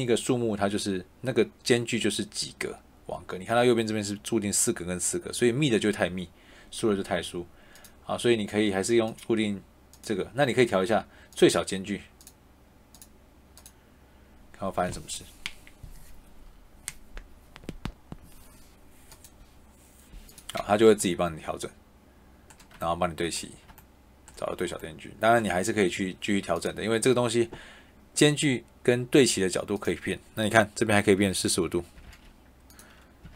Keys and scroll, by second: 31.8 4, 31.9 5, 33.1 4, 33.2 5.